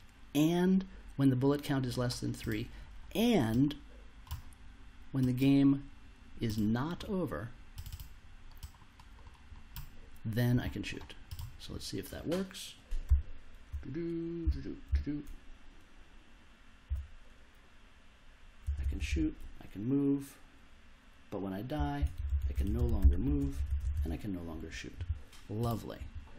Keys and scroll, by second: 13.0 s, 16.8 s, 18.6 space, 21.5-23.7 typing.